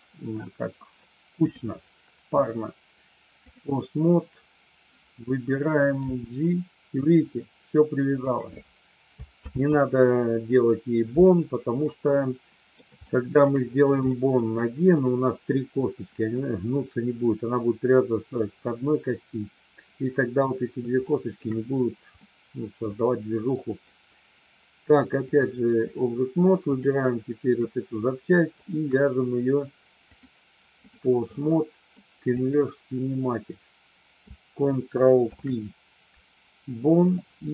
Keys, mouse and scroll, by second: 1.6-3.6 drag, 5.9 g, 8.2 click, 9.3 ctrl+z, 11.8 middle click, 13.1 shift+middle click, 14.2 shift+middle click, 21.1 shift+middle click, 22.2-23.8 middle drag, 25.2 click, 26.6 click, 28.6 shift+click, 30.1 click, 31.3 middle click, 35.2 ctrl+p.